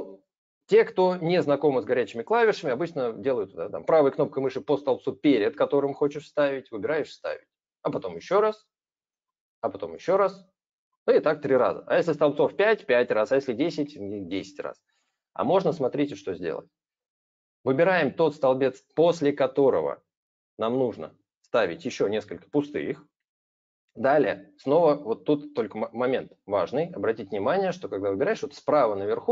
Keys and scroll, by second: 15.7 ctrl+z, 16.0 ctrl+z.